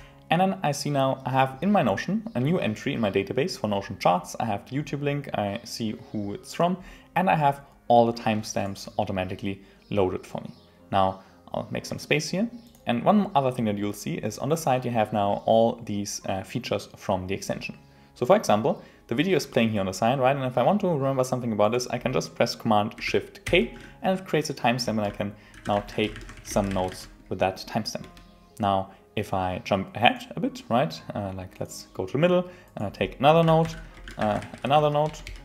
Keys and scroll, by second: 9.2 Return, 23.4 shift+super+k, 28.0 Return, 33.6 shift+super+k.